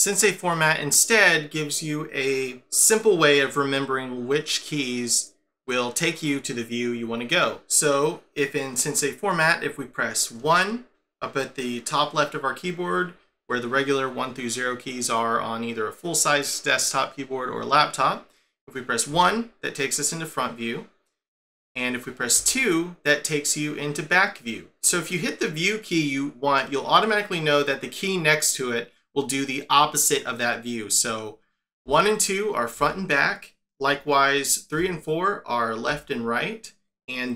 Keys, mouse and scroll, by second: 10.4 KP_1, 19.1 KP_1, 22.4 2, 31.8 1, 32.7 2, 34.7 3, 35.8 4.